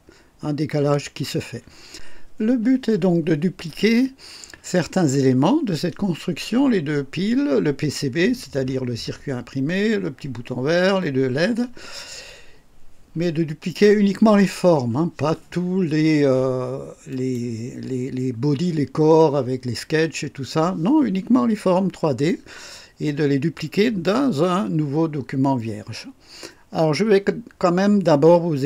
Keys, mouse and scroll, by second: 17.1 click.